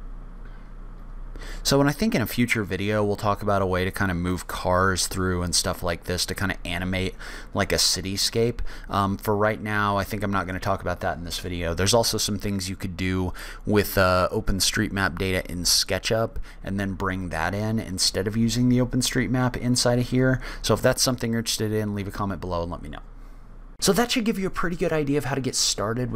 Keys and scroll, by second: 11.7 o.